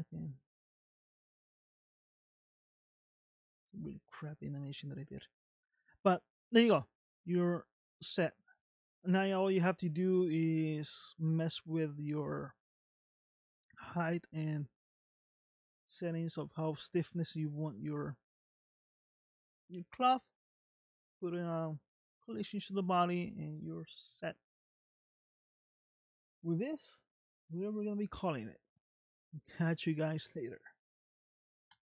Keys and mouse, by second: 0.4 space, 4.1 space, 7.0-8.5 middle drag, 12.0 middle click, 14.2 middle click.